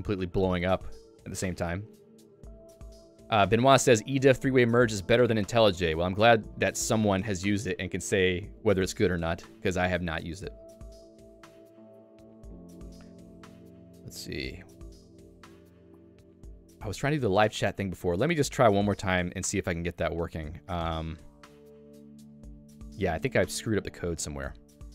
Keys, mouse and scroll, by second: 11.6 click, 24.8 ctrl+alt+n.